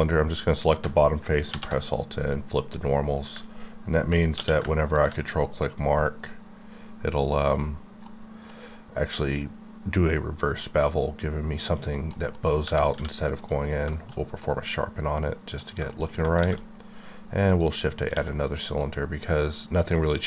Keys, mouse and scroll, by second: 1.5 alt+n, 2.3 click, 4.4 q, 4.9 ctrl+click, 7.1-7.7 scroll up 4, 8.0 middle click, 8.6-9.9 scroll up 9, 11.0 scroll up 1, 11.8 scroll up 1, 11.9 click, 12.3 middle click, 12.5 scroll down 1, 12.9 q, 13.4 click, 13.9 shift+middle click, 15.6 scroll down 2, 15.9 shift+middle click, 16.3 shift+scroll down 1, 16.4 shift+a, 17.5 click, 17.9 scroll, 18.0 scroll up 1, 18.1 q, 18.5 click, 18.6 click, 18.8 middle click, 19.6 middle click.